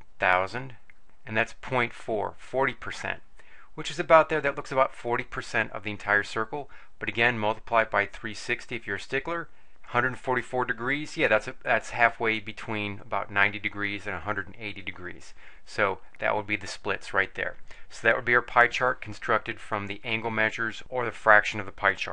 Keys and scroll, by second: 0.2 0, 1.0 Return, 2.2-2.9 typing, 7.9 3, 8.6 6, 9.3 0, 9.7 Return.